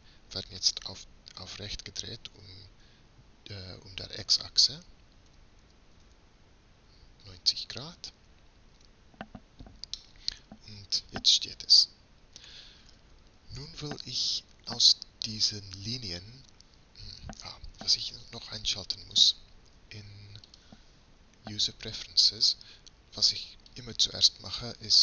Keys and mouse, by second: 5.4 r, 10.2-12.0 middle drag, 19.9-20.5 middle drag, 20.5-22.2 drag, 22.2-25.0 middle drag.